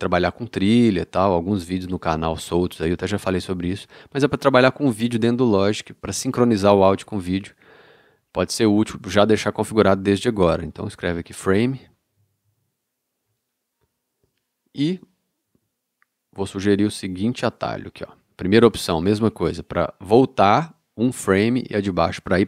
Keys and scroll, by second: 11.5-13.0 typing.